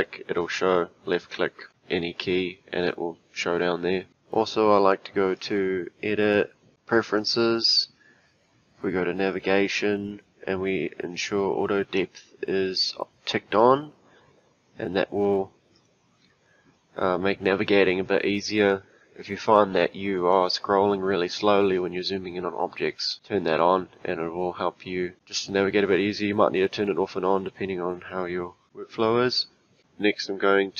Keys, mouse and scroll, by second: 5.4-6.7 drag.